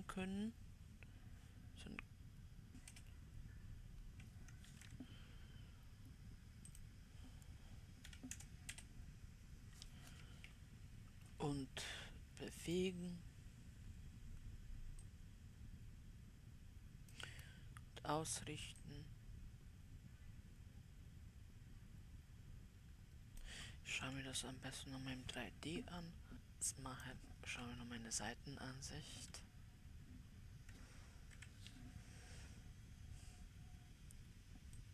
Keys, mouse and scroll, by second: 5.3 ctrl+z, 7.2-15.6 drag, 19.3-22.3 drag, 24.5 KP_7, 26.3 click, 28.0 KP_9, 29.6 KP_3, 31.8 w, 33.3-34.9 scroll up 2.